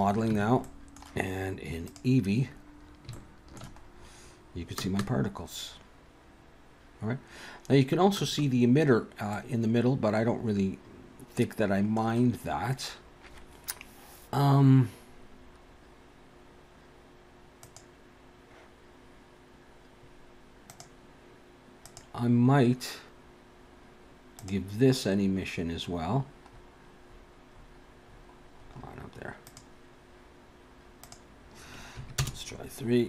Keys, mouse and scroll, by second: 0.3 Tab, 0.6 middle click, 1.9 click, 2.5-2.9 scroll up 3, 3.2 shift+middle click, 3.8-4.9 scroll up 1, 4.9 space, 8.2 space, 9.3 middle click, 17.6 click, 20.7 click, 21.9 click, 24.4 click, 31.0 click.